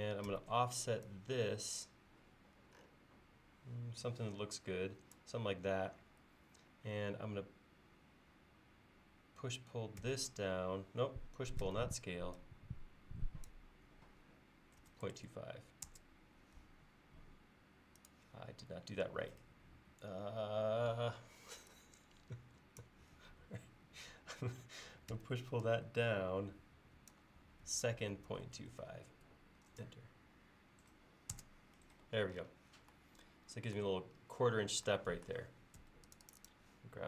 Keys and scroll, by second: 0.4 f, 10.1 s, 11.7 p, 14.9-15.9 typing, 25.2 p, 27.9-29.3 typing, 31.4 Return, 35.9 space.